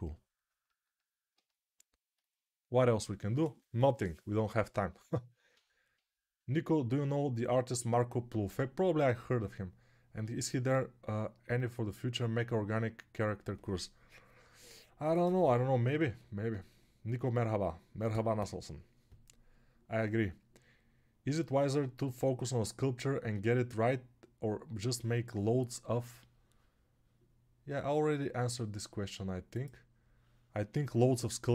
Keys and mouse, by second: 0.3-31.5 ctrl+alt+drag, 0.3-31.5 ctrl+alt+middle drag.